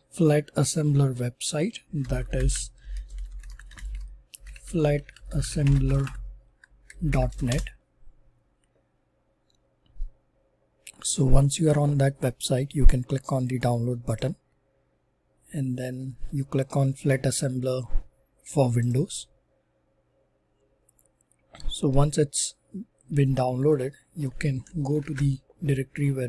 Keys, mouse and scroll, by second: 1.8-8.9 typing, 10.2-11.8 typing, 14.1-15.4 drag, 18.8 click, 24.8 click, 25.0 super+e.